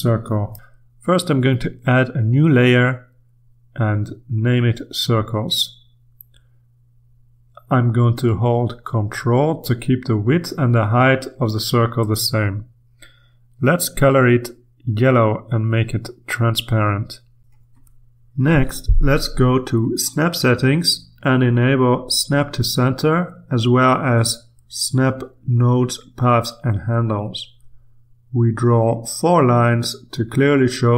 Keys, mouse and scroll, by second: 2.3 click, 7.0 click, 8.5-10.8 ctrl+shift+drag, 12.7 click, 13.8-18.9 drag, 19.5 click, 21.0 click, 29.2 click.